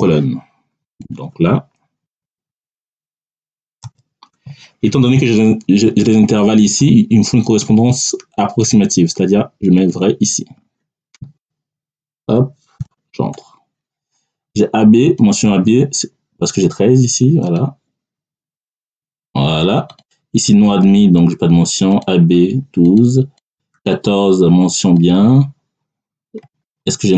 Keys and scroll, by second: 2.1 3, 3.7 ., 12.7 [, 13.2 Return.